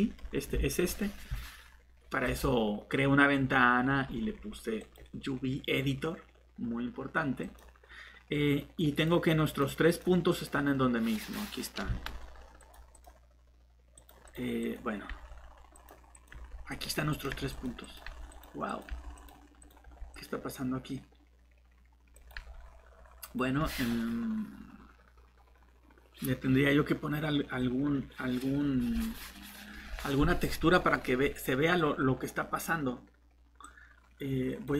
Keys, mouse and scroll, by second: 0.3 scroll down 1, 2.2 click, 3.5-4.8 scroll up 1, 4.8 click, 27.5-29.4 scroll down 1, 33.6 click.